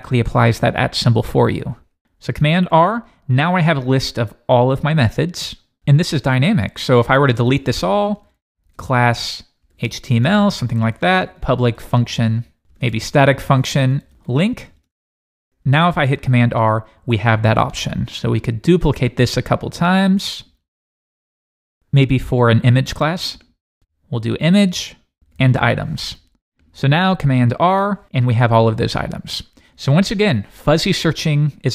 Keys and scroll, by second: 2.7 super+r, 15.9 super+s, 16.3 super+r, 20.7 super+c, 21.2 Return, 21.4 super+v, 21.6 Return, 21.7 super+v, 25.9 super+s, 27.5 super+r.